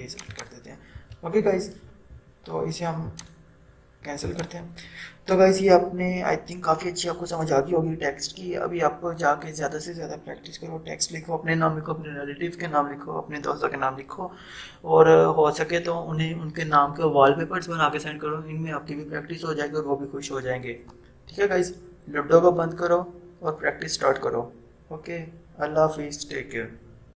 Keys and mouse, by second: 0.1 click, 3.2 click.